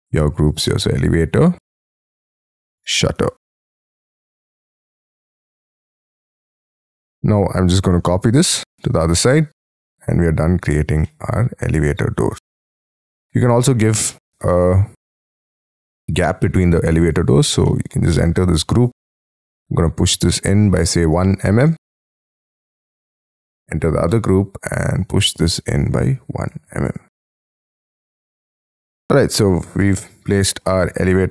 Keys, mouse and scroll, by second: 0.0-1.0 typing, 2.2-4.1 typing, 4.5 Return, 5.7-6.0 scroll up 6, 6.0 middle click, 6.7 shift+middle click, 7.4-8.2 scroll up 5, 7.6 m, 9.0 scroll down 6, 10.3-11.0 scroll down 14, 11.0 middle click, 13.0-14.5 scroll up 5, 14.5-15.7 scroll down 5, 15.7 middle click, 17.0 double click, 17.2 double click, 17.6 middle click, 18.3-19.4 scroll up 18, 19.4 p, 21.1 1, 21.7 m, 21.8 m, 22.0 Return, 22.3 space, 22.6 Escape, 22.9 middle click, 23.6 double click, 24.2 middle click, 24.8 p, 25.8-27.1 typing, 27.3 Escape, 27.7 Escape, 27.9-28.9 scroll down 13, 28.5 Escape, 28.9 middle click.